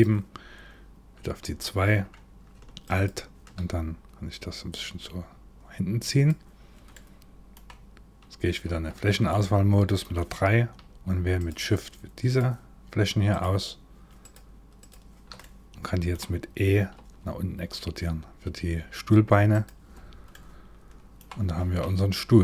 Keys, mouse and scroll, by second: 1.0 2, 2.5 alt+click, 3.9 click, 6.5 middle click, 8.3 3, 8.9 middle click, 11.0 shift+click, 11.9 shift+click, 12.9 shift+click, 13.8 shift+click, 14.4 shift+click, 15.0 middle click, 16.6 e, 19.6-19.9 scroll down 3, 19.9 middle click, 21.2 Tab, 21.6-22.1 scroll down 1, 22.2 shift+middle click.